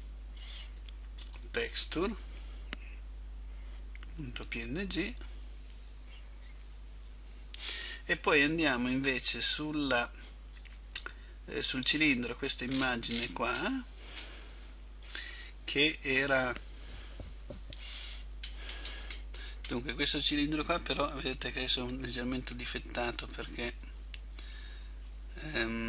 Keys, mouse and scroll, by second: 7.0 Return, 18.5-19.7 scroll up 13, 20.7 middle click, 20.7-21.2 scroll up 1, 23.3 Tab, 24.0 Tab.